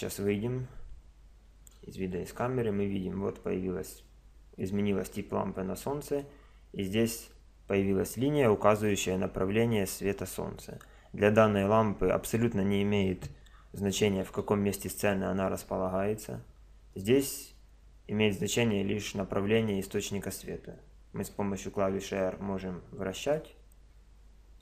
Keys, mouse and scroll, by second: 0.0 Escape, 1.7 KP_0, 2.6-4.4 middle drag, 5.5 middle click, 9.0-14.2 middle drag, 14.2 g, 21.2 r.